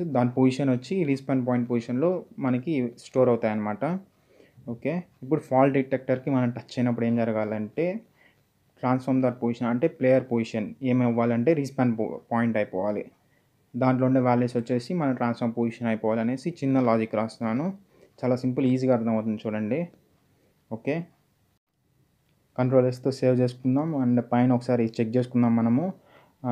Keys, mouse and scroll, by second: 1.8 click, 7.4-11.2 typing, 8.8 Return, 12.3-13.4 typing, 13.6 Return, 15.3 ;, 19.2 click, 21.0 click, 22.7 s, 23.4-24.3 scroll up 1.